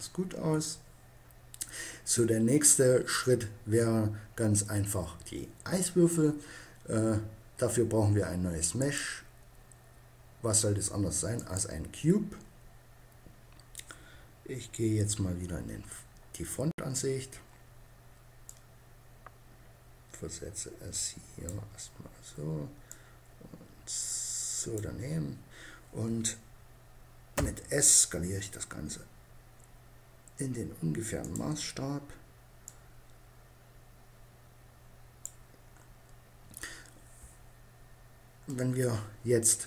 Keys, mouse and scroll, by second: 0.0 Escape, 8.6-10.3 drag, 14.6 KP_1, 18.2-19.7 middle drag, 18.3 click, 19.7 click, 22.7-24.3 drag, 27.0 s, 31.0-34.0 drag, 34.2-36.7 middle drag, 37.5 middle click.